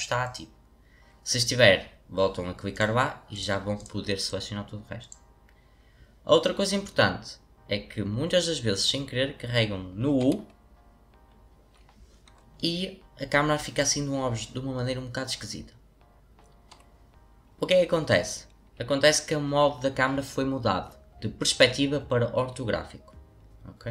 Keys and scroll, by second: 10.2 u.